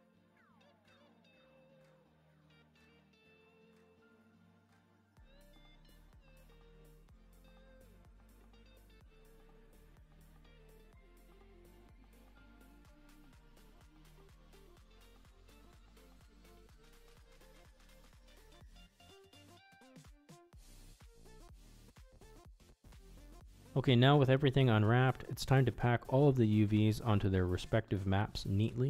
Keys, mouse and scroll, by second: 0.0 s, 0.8 shift+middle click, 1.4 shift+middle click, 1.7 Tab, 2.0 shift+middle drag, 2.5 middle click, 2.7 middle drag, 3.0 shift+middle click, 3.8 Tab, 3.9 a, 4.0 u, 4.7 s, 5.6 Tab, 5.6 click, 5.8 Tab, 6.0-9.0 typing, 7.6 Tab, 7.8 Tab, 9.4 Tab, 9.5 click, 9.6 middle click, 9.7 shift+middle click, 9.8 click, 10.1 Tab, 10.1 a, 10.2 u, 10.6 shift+middle click, 10.9 ctrl+z, 10.9 s, 11.8 Tab, 11.8 click, 12.0 middle click, 12.0 shift+middle click, 12.2 shift+middle click, 12.5 Tab, 12.8 a, 12.9 u, 13.4 s, 14.3 Tab, 14.5 click, 14.7 Tab, 14.7 a, 14.8 u, 16.0 Tab, 16.2 middle click, 16.8 a, 16.9 u, 17.4 middle click, 17.5 middle click, 17.6 middle click, 17.8 middle click, 18.1 middle click, 18.8 middle click, 18.8 s, 19.1 middle click, 19.6 middle drag, 19.9 Tab, 19.9 drag, 20.1 middle click, 20.2 middle click, 20.6-21.0 middle drag, 21.0 middle click, 21.6-21.9 drag, 22.7 middle click, 23.0-23.8 shift+middle drag.